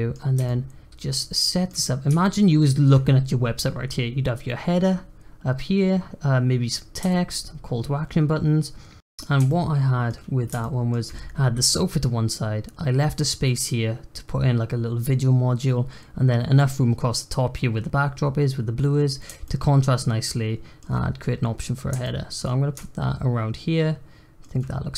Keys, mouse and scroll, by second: 1.7-2.2 scroll down 1, 2.2-5.3 shift+middle drag, 7.1-9.0 shift+middle drag, 9.5-10.3 shift+middle drag, 10.3 scroll up 1, 10.6-13.6 shift+middle drag, 19.4-22.6 shift+middle drag, 22.6 scroll down 1, 22.8-24.9 shift+middle drag.